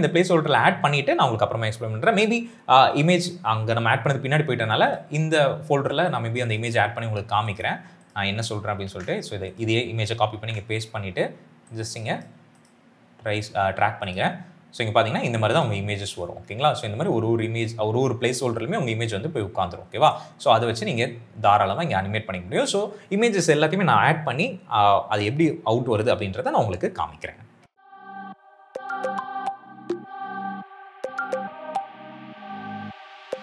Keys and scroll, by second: 8.7 ctrl+c, 10.3 ctrl+v, 28.0-31.0 typing, 32.0 s, 32.8 s.